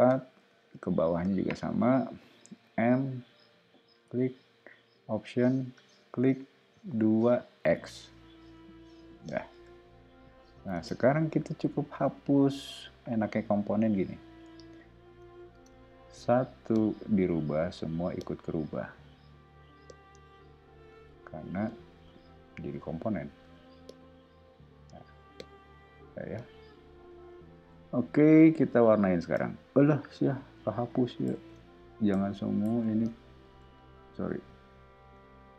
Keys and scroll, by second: 0.4 o, 2.6 m, 7.2 2, 7.6 x, 7.9 Return, 8.7 o, 10.7 space, 13.8 o, 15.5 space, 16.1 e, 21.2 o, 23.4 e, 27.4 o, 31.3 super+z, 35.1 e.